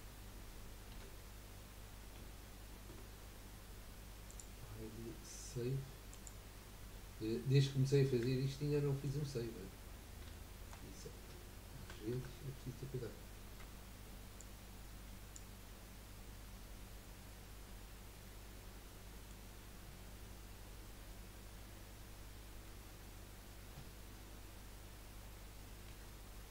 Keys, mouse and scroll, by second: 0.9 i, 2.1 z, 4.2-8.4 drag, 8.4-9.5 shift+middle drag, 9.5-10.3 scroll up 4, 10.3-11.8 shift+middle drag, 11.8 a, 12.1 a, 13.6 b, 16.5-17.0 scroll down 3, 17.0-20.1 middle drag, 20.7 KP_1, 22.7 KP_3, 25.9 3.